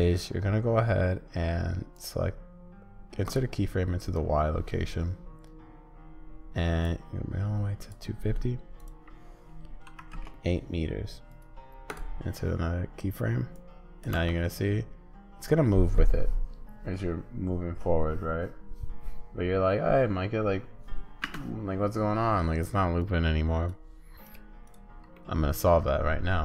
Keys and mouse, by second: 1.9-3.4 drag, 6.8-12.0 drag, 13.5 click, 14.1 space, 21.2 space, 23.0 click, 24.2 click, 25.1 middle click.